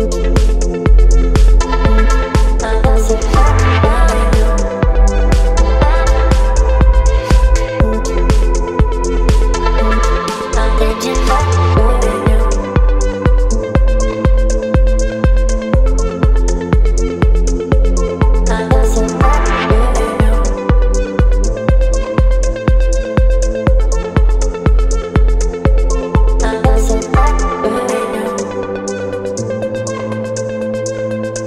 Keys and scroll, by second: 0.5 space, 1.6 Delete, 2.2 space, 4.4 space, 5.1 space, 8.2 space, 10.6 Delete, 11.1 space, 11.6 v, 12.8 space, 17.0 Return, 21.1 Delete, 22.5 Delete, 24.1 Delete, 26.0 space, 29.0 ctrl+BackSpace, 30.7 Up, 31.3 Up.